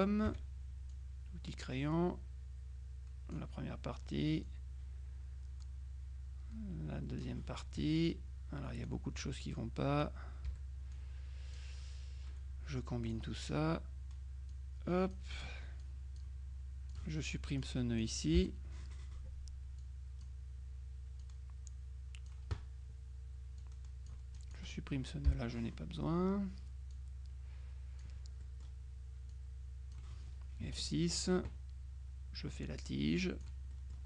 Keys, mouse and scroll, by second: 0.3 F6, 1.0-3.9 drag, 4.6-7.8 drag, 9.0-10.6 drag, 10.6 Delete, 11.0 click, 13.1 click, 14.6 click, 15.9 click, 17.0 click, 17.7 click, 18.5 Delete, 19.9 click, 21.3-22.9 drag, 23.7 click, 25.4 Delete, 27.0-28.6 drag, 29.4 click, 30.7 F6, 31.0 click, 32.7-34.0 drag.